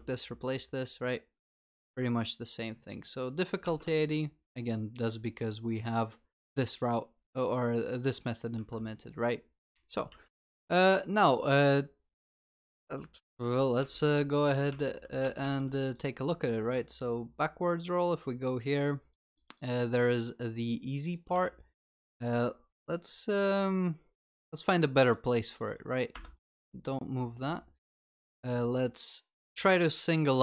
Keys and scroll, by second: 3.7 ctrl+Tab, 8.6 ctrl+Tab, 10.1 ctrl+s.